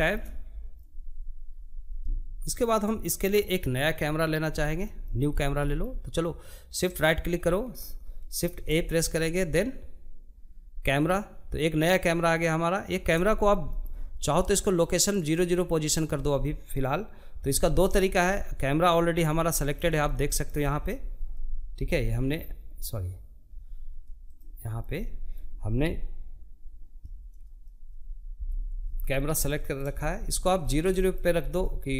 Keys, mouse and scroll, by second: 2.6-3.3 scroll up 4, 3.3 shift+middle click, 4.1 scroll up 1, 4.3-5.6 shift+middle drag, 5.6-7.2 shift+right drag, 9.6 shift+a, 11.1-27.1 middle drag, 27.1 KP_Decimal, 27.8-28.3 scroll down 5, 28.3 middle click, 28.5 scroll up 1, 29.0 shift+middle click, 29.3 scroll down 1, 29.4 scroll up 1, 29.7 shift+middle click, 30.0-30.9 scroll down 4, 30.3 shift+middle click, 30.9 shift+middle click, 31.5 scroll down 1, 31.7-31.9 shift+middle drag.